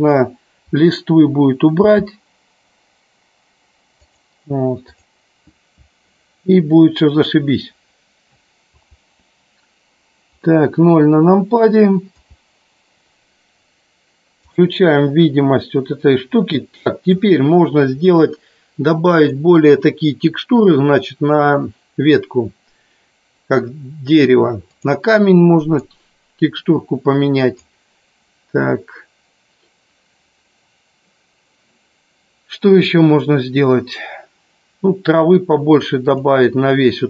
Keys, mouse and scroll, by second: 4.0 click, 8.9 KP_0, 12.1 KP_0, 16.7 middle click, 19.3 click, 24.8 click, 25.9-27.8 drag, 36.0 click.